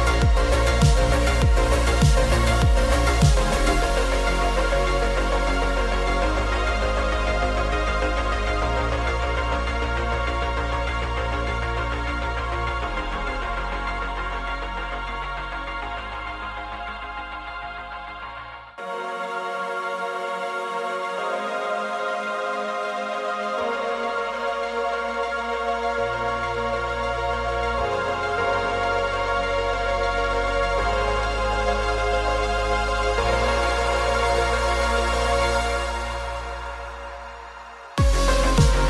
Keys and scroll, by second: 31.8 super+-, 32.2 super+-, 34.8 z, 35.7 v.